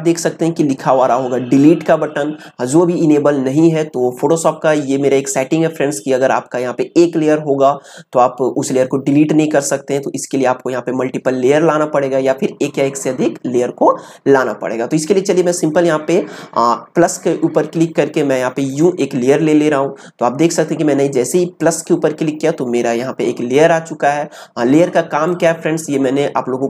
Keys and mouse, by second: 18.6 click, 25.2 click.